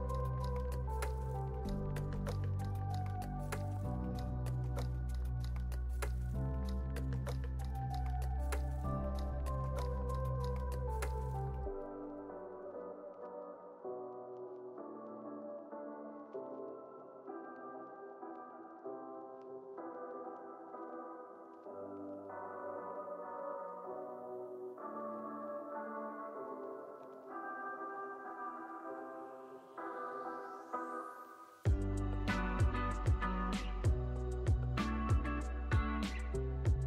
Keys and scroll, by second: 4.5 alt+], 5.5 z, 6.3 alt+[, 25.9 alt+x, 28.6 z, 29.1 alt+x, 30.2 alt+x, 34.7 z.